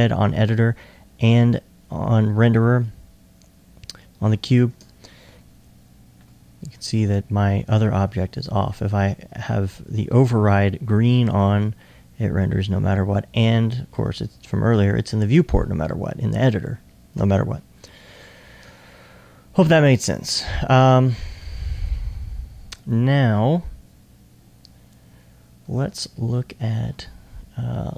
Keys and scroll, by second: 11.4 super+r.